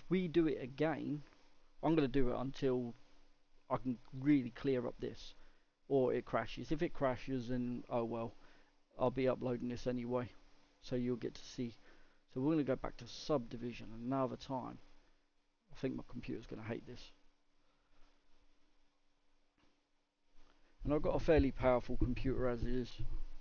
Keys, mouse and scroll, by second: 3.3-4.2 scroll up 2, 4.2 middle click, 4.6 scroll down 2, 5.3-5.7 scroll down 1, 5.9-23.4 middle drag.